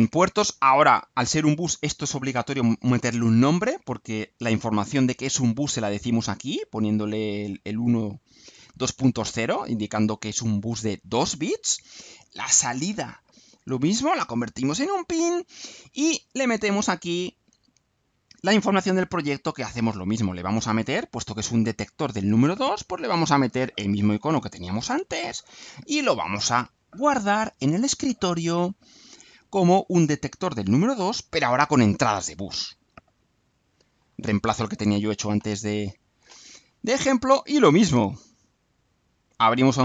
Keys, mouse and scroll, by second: 12.7 click, 13.9 click, 15.0 click, 18.3 click, 19.7 click, 22.0 click, 23.4 click, 24.4 click, 26.8 click, 27.9 click, 29.8 click, 30.9 click, 32.7 click, 38.9 click.